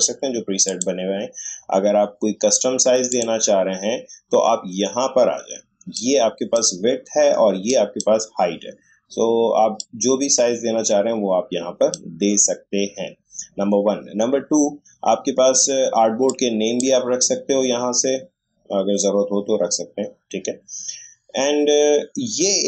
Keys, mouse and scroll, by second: 1.5-3.1 scroll up 1, 3.1 click, 5.9-14.3 drag, 16.2-19.2 drag.